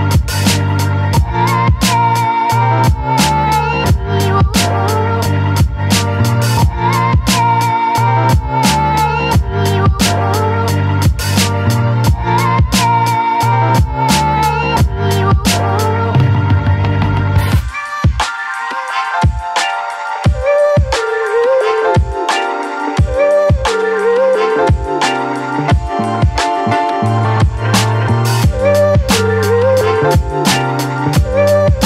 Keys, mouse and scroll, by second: 0.8 ctrl+space, 1.1 ctrl+click, 1.3 ctrl+space, 1.9-3.7 drag, 3.7-6.8 shift+drag, 7.5 Left, 8.9 Right, 11.0 ctrl+e, 11.5 space, 11.8-14.2 alt+drag, 14.2 ctrl+a, 14.5 ctrl+c, 15.5 click, 15.8 space, 16.1 click, 16.3 space, 17.0 click, 18.1 ctrl+v, 19.4 right click, 20.8 click, 21.7 ctrl+t, 23.2-31.8 alt+drag.